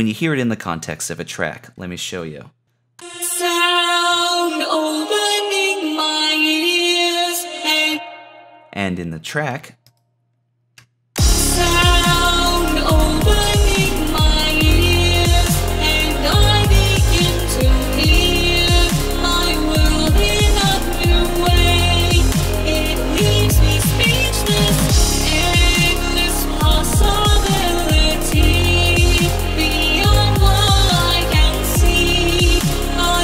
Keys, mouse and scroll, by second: 26.1 typing, 31.4 typing.